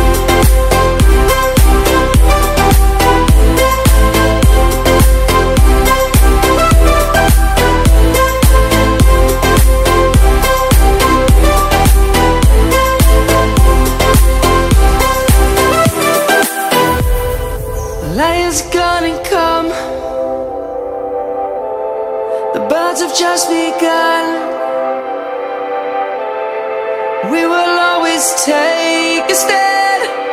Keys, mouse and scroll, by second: 1.6 click, 8.5 right click, 15.5 ctrl+shift+i, 16.0 typing, 18.4 click, 18.5 F10, 19.0 click, 21.0 KP_1, 21.4 KP_0, 21.5 KP_2, 21.7 KP_4, 22.7 Tab, 22.8 KP_1, 23.0 KP_0, 23.2 KP_2, 23.4 KP_4, 24.3 click, 27.5 F10, 28.1 click.